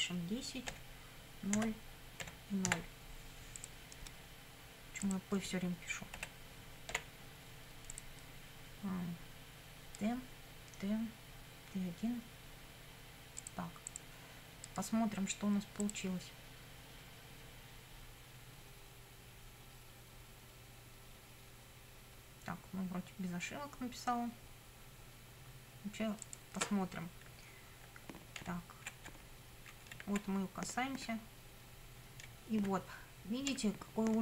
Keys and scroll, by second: 0.0-2.7 typing, 6.2 BackSpace, 6.9 t, 27.3 Right, 28.0 Up, 28.5 Right, 29.0 Up, 29.2 Left, 30.0 Right, 30.4 Up, 32.3 Down.